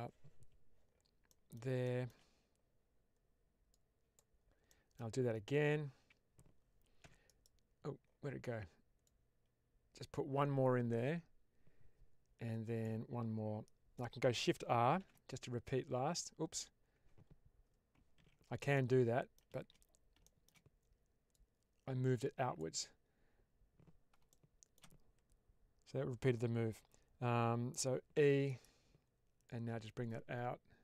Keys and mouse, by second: 1.2 middle click, 1.7 shift+middle click, 3.6 click, 4.6 middle click, 6.9 e, 7.1 right click, 8.9-12.7 drag, 14.9 shift+r, 18.1 ctrl+z, 18.6 middle click, 21.2-22.4 drag, 24.2 shift+middle click, 28.0 e, 28.3 right click, 29.4-30.8 drag.